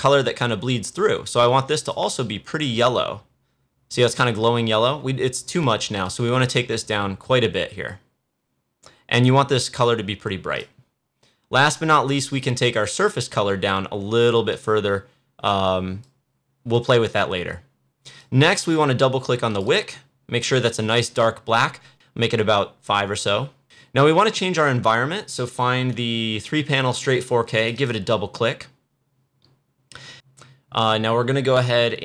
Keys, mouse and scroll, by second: 1.9 click, 6.1 click, 10.6-18.2 drag, 23.1 click, 25.5 click, 25.6 scroll up 1, 27.5 click, 27.5 click.